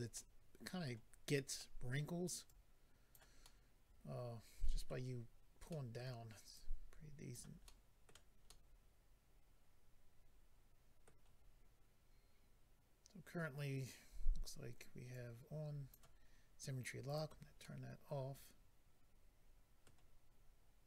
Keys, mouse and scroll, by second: 0.1 middle click, 1.6 middle click, 2.4 click, 3.4 middle click, 5.7 middle click, 6.5 click, 7.3 click, 7.6 middle click, 8.5 middle click, 13.8 scroll down 1, 15.1 click, 17.1 click, 17.2 click, 17.6 middle click.